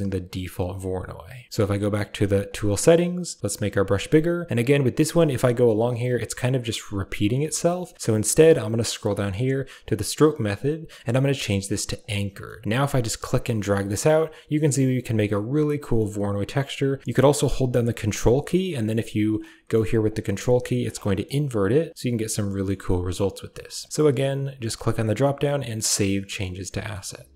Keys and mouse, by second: 2.4 click, 3.5 f, 4.6-7.4 drag, 7.4 ctrl+z, 10.3-12.0 drag, 12.6 middle click, 13.0-15.2 drag, 15.3 middle click, 16.4 click, 17.0 middle click, 17.3 middle click, 18.2-19.3 ctrl+drag, 19.5 middle click, 20.1 ctrl+click, 21.0 middle click, 21.9 click, 22.2 middle click, 23.0 middle click, 24.7-25.9 drag, 26.5 middle click.